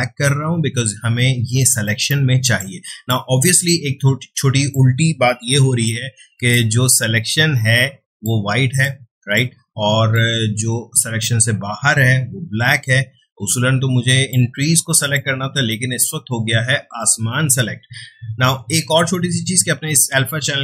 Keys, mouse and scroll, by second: 1.9 space, 2.0 click, 3.0-5.4 drag, 5.4 ], 5.9 ], 6.2 ], 6.5-8.3 drag, 8.8-14.1 ctrl+drag, 14.1 space, 14.3 click, 14.6 space.